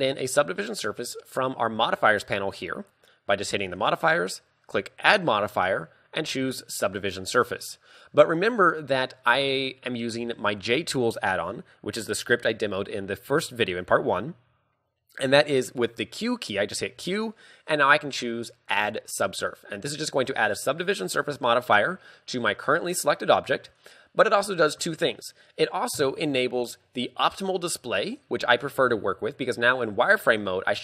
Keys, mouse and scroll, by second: 4.9 click, 10.0-10.3 scroll up 1, 10.5 shift+middle click, 11.4-13.1 scroll down 1, 17.0 q, 28.1 scroll up 2, 28.9 z, 29.6 middle click.